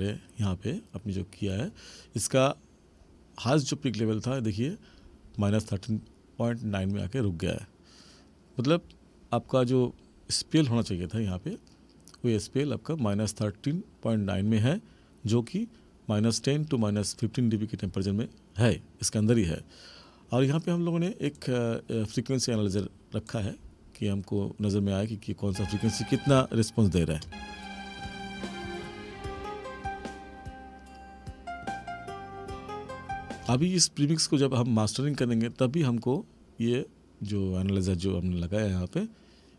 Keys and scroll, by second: 25.5 space, 33.5 space.